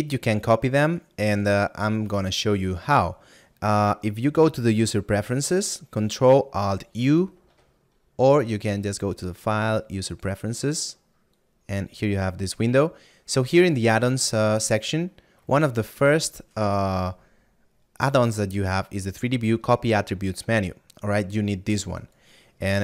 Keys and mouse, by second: 0.9 right click, 11.9 click.